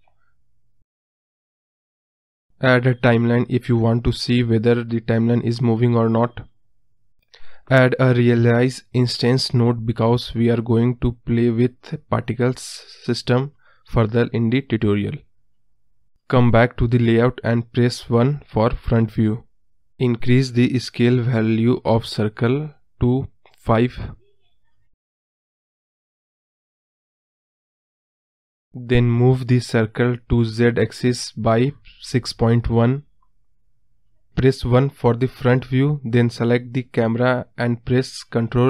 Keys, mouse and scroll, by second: 4.1 space, 5.0 space, 5.9-8.3 drag, 8.3 space, 10.1 space, 11.2-15.3 drag, 18.8 click, 19.3-20.0 scroll up 3, 20.0-20.9 middle drag, 20.9 KP_1, 21.6-22.3 scroll up 2, 25.2-27.5 drag, 28.6 Return, 28.7-29.1 scroll down 1, 29.1-31.4 scroll up 1, 31.4-32.4 drag, 32.4-33.4 scroll down 2, 33.4 KP_Decimal, 33.7-34.2 scroll down 2, 34.2 scroll up 1, 34.3 middle drag, 34.5-34.9 scroll down 2, 34.9-36.8 middle drag, 36.8 scroll up 1, 37.1-38.0 scroll down 1, 38.0 KP_1.